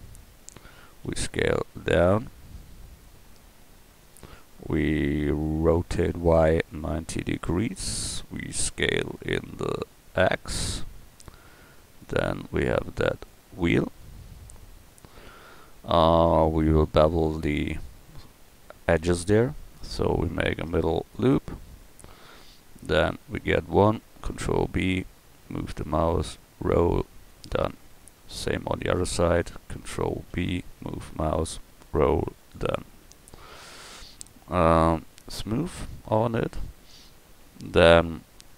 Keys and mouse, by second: 1.1 s, 4.2 middle click, 5.7 r, 8.6 s, 13.3-16.5 drag, 19.2 Tab, 20.4 ctrl+r, 22.8 click, 23.9 click, 24.3 ctrl+b, 28.8-30.3 middle drag, 30.3 ctrl+b, 33.0 Tab, 33.5-35.3 drag, 36.1 click, 36.6 middle click, 37.4 Tab.